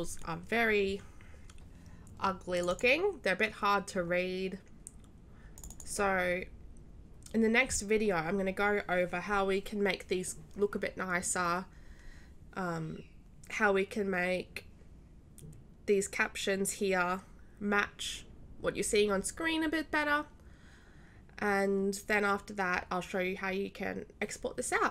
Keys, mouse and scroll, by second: 2.5 click, 5.5 click.